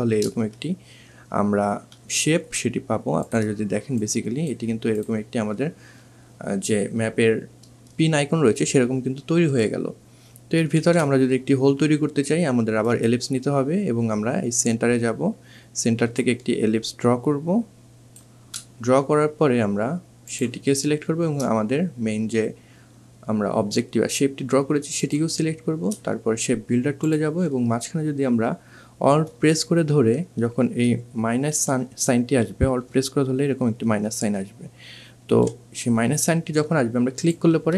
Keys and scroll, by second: 9.6 ctrl+z, 34.3 2.